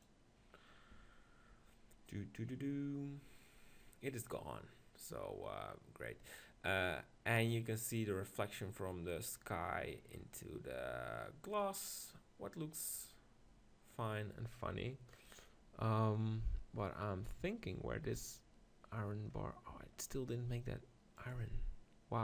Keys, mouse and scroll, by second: 0.3 click.